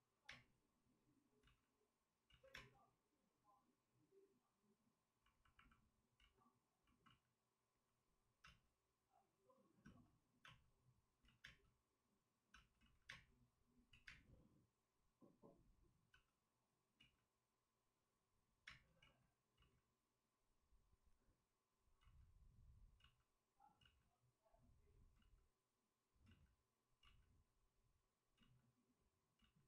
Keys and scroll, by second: 1.2 space, 1.4 ctrl+z, 2.3 ctrl+z, 2.5 space, 6.1 ctrl+z, 7.0 ctrl+z, 8.1 ctrl+z, 8.4 space, 9.8 space, 10.4 space, 11.2 ctrl+z, 11.4 space, 12.7 ctrl+z, 13.0 space, 13.9 ctrl+z, 14.0 space, 16.9 ctrl+z, 18.6 space, 19.0 ctrl+z, 21.9 ctrl+z, 22.0 ctrl+z, 22.9 ctrl+z, 26.2 ctrl+z.